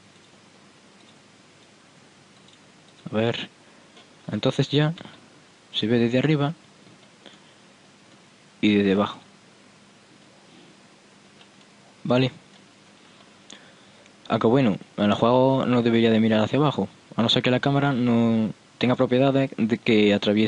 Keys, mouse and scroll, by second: 0.3-3.6 drag, 1.2-2.7 right drag, 3.1-4.9 right drag, 4.9 middle click, 6.0 p, 9.2 p, 11.4 p, 14.7-15.3 middle drag, 16.7-18.0 middle drag, 19.1-20.1 middle drag.